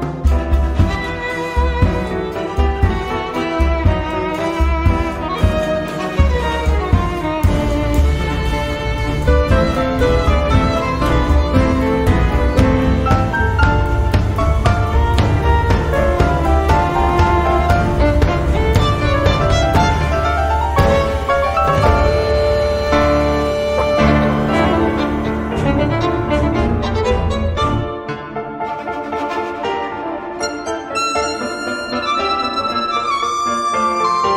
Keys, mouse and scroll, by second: 0.7 click, 1.7 click, 2.7 right click, 3.7 click, 5.0 click, 6.3 click, 7.4 click, 8.3 right click, 9.3 click, 10.6 click, 11.7 BackSpace, 13.0-14.1 typing, 14.9 click, 15.6 click, 16.9-25.5 drag, 25.6 click, 26.0 click, 26.6 0, 27.3 click, 28.2-30.1 drag, 30.3-30.7 scroll up 1, 31.1 scroll down 1, 31.7-32.1 scroll up 2, 33.2-34.3 drag.